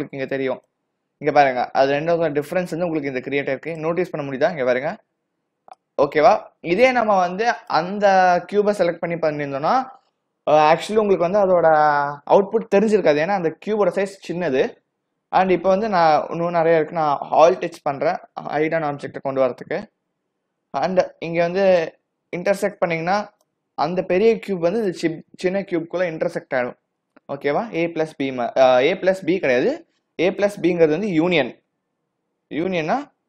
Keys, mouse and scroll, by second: 0.8 click, 4.2-5.0 scroll up 5, 5.0-5.8 scroll down 5, 5.8 click, 7.6 click, 18.6 alt+h, 20.0 a, 20.1 a, 21.5 click, 23.5 click, 31.2 click.